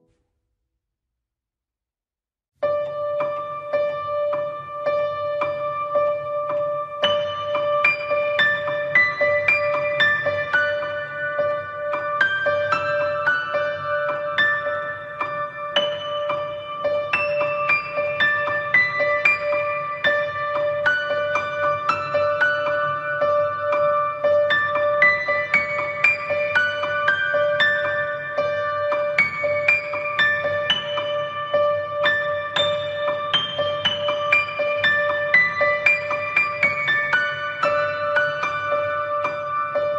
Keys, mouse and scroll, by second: 0.1 middle click, 0.4 middle click, 1.0 f, 1.3 ctrl+click, 1.6 ctrl+click, 1.9 ctrl+click, 2.3-3.7 ctrl+click, 4.1 ctrl+click, 4.2 middle click, 4.7 ctrl+click, 5.1 ctrl+click, 5.4 f, 6.0 ctrl+click, 6.5 ctrl+click, 6.6 ctrl+click, 7.4 ctrl+click, 7.6 ctrl+click, 8.1 ctrl+click, 8.1 middle click, 9.0 ctrl+click, 9.3 ctrl+click, 9.6 ctrl+click, 9.9-13.1 ctrl+click, 13.1 middle click, 13.6 ctrl+click, 13.9 ctrl+click, 14.4 ctrl+click, 15.3 ctrl+click, 16.0 ctrl+click, 16.0 middle click, 16.7 ctrl+click, 16.9 ctrl+click, 17.3 ctrl+click, 17.6 ctrl+click, 17.9 ctrl+click, 18.9 ctrl+click, 19.5 ctrl+click, 25.3 ctrl+click, 25.3 middle click, 25.7 ctrl+click, 26.1 ctrl+click, 26.5 ctrl+click, 26.9 ctrl+click, 27.0 ctrl+click, 27.6 ctrl+click, 27.9 ctrl+click, 28.7 ctrl+click, 30.4 ctrl+click, 30.5 f, 30.9 click, 32.1 shift+click, 33.5 middle click, 33.9 ctrl+click, 34.2 ctrl+click, 34.9 ctrl+click, 35.1 ctrl+click, 35.4 ctrl+click, 35.5 click, 36.0 click, 36.6 click, 36.8 click, 37.0 shift+click, 37.3 shift+click, 37.6 click, 38.0 click, 39.2 ctrl+click, 39.6 ctrl+click.